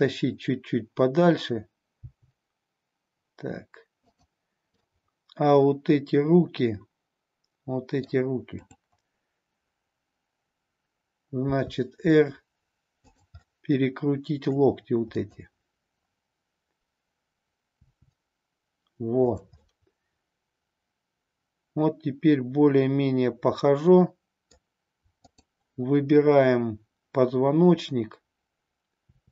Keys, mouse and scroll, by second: 2.0 g, 4.8-8.1 middle drag, 8.5-10.9 drag, 11.4 r, 13.4-14.6 middle drag, 17.7 r, 19.3 click, 19.7-24.4 middle drag, 25.2-27.7 drag, 28.9 r.